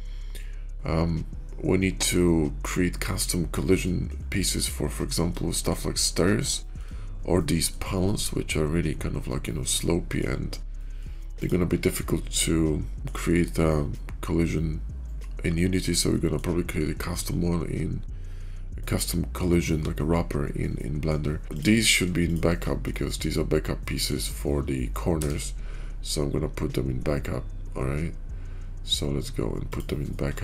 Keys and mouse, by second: 0.3-3.1 middle drag, 3.2-3.7 shift+middle drag, 5.4 shift+middle drag, 6.4 shift+middle click, 7.2-7.6 middle drag, 9.6-10.1 middle drag, 10.6 middle drag, 11.2 click, 12.9 shift+middle click, 13.8-16.3 middle drag, 18.8-19.2 middle drag, 20.6-21.0 middle drag, 22.8-24.0 middle drag, 24.9 m.